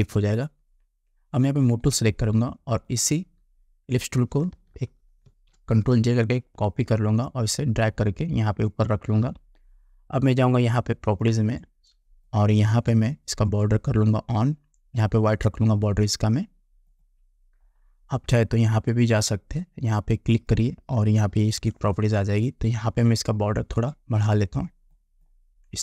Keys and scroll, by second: 5.4 ctrl+j.